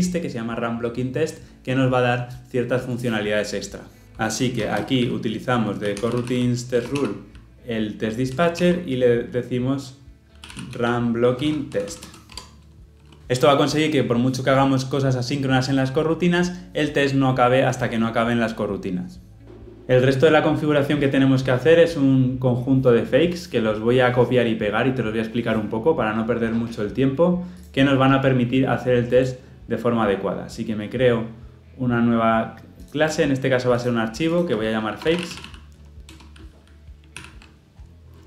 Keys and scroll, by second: 6.7 Return, 12.2 Return, 12.3 Tab, 37.1 ctrl+v.